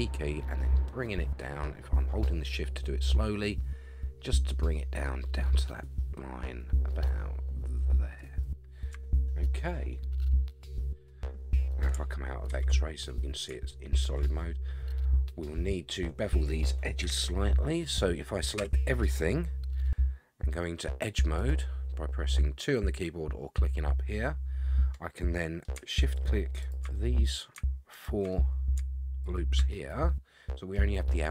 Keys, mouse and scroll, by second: 10.4-11.6 middle drag, 12.5 alt+z, 13.7 shift+middle click, 14.4-16.6 middle drag, 17.0 KP_1, 18.0 middle click, 18.6 a, 21.4 click, 25.2 middle click, 26.1 shift+click, 26.6 shift+click, 26.9 middle click, 27.9 shift+click, 28.3 middle click, 29.2 shift+click, 29.7 scroll down 1, 29.7-30.7 middle drag.